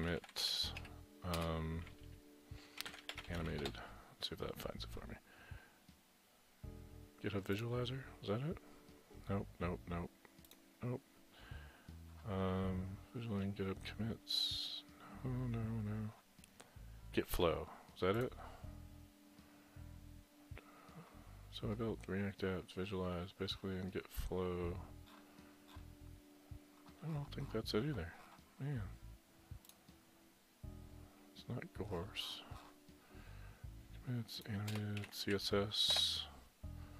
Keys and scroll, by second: 0.0-0.8 typing, 2.6-3.5 typing, 3.6 Return, 34.8-35.6 typing, 35.9 Return.